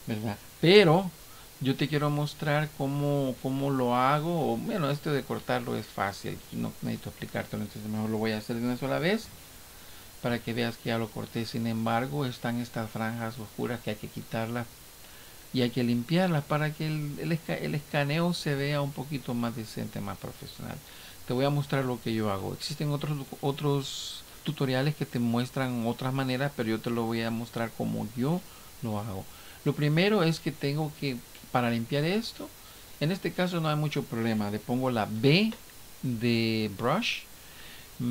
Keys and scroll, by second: 0.7 ctrl+z, 9.2 ctrl+F5.